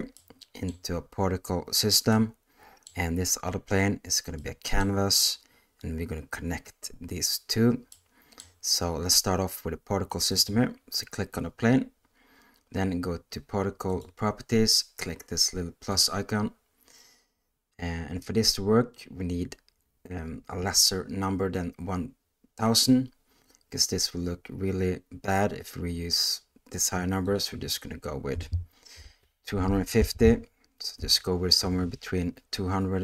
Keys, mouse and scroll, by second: 0.2 middle click, 2.1-2.8 middle drag, 4.4 middle click, 7.9 middle click, 10.3 click, 15.9 click, 27.2-31.0 drag.